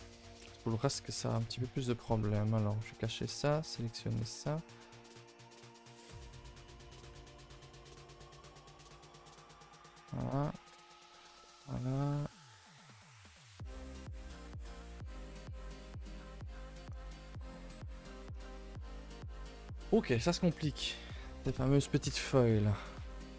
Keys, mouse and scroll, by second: 2.0 click, 5.4 click, 12.4 click, 14.0 click, 18.4-19.1 middle drag.